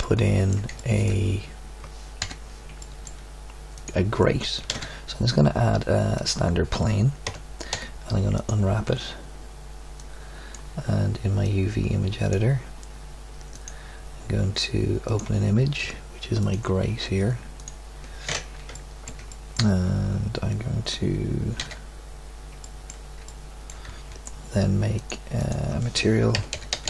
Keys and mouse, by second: 2.3 KP_7, 4.6 shift+a, 7.2 Tab, 7.7 u, 9.9 click, 21.6 alt+z.